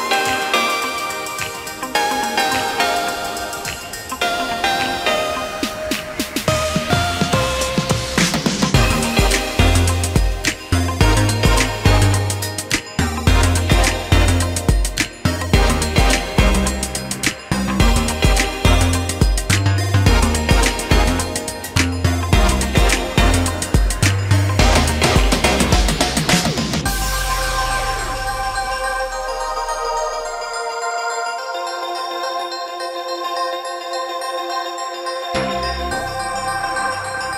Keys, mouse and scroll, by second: 5.3 shift+middle click, 8.4 shift+middle click, 9.2 space, 15.3 shift+middle click, 15.8 space, 15.9 Escape, 16.7 Escape, 21.3 shift+middle click, 27.8 space, 27.9 Escape, 28.2 Escape, 31.7 shift+middle click.